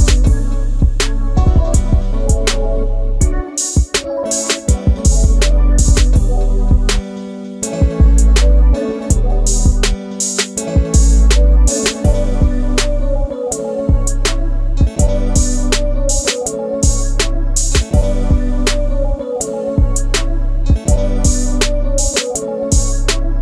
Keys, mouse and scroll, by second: 3.6 m, 4.6 click, 5.0 Escape, 5.0 space, 5.5 middle click, 6.3 middle click, 8.1 middle click, 8.8 middle click, 10.0 ctrl+g, 13.7 m, 14.4 click, 14.5 space, 18.7 ctrl+g, 19.8 e.